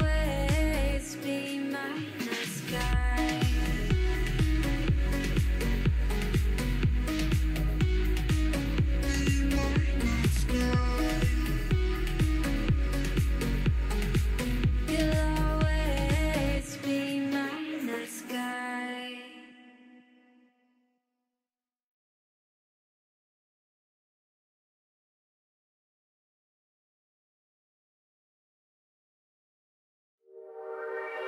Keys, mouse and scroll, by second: 0.0-1.6 typing, 2.7 s, 3.5-4.0 scroll up 2, 4.0 g, 5.1 scroll up 2, 5.4 1, 5.6 click, 6.0 g, 7.2 ctrl+l, 7.8 shift+g, 8.4 shift+d, 11.0 alt+z, 11.2 middle click, 12.1 ctrl+r, 12.9 ctrl+r, 13.7 ctrl+r, 14.5 ctrl+r, 15.0 middle click, 15.3 scroll down 1, 15.4-16.6 shift+middle drag, 16.6 scroll down 2, 16.7-17.8 middle drag, 18.0 KP_1, 18.3-19.3 scroll up 2, 19.3 middle click, 20.1 click, 21.0 ctrl+click, 21.3 alt+click, 21.5 alt+click, 22.1 g, 22.7 middle click, 22.9-23.4 scroll up 6, 23.4 3, 23.7 middle click, 24.3 3, 24.9 alt+z, 25.2 click, 25.5 KP_3, 25.9 KP_1, 26.1 scroll down 10, 26.4 shift+middle click, 26.5 scroll up 2, 26.8 g, 29.1 middle click, 29.3-30.1 scroll up 3, 30.1 g.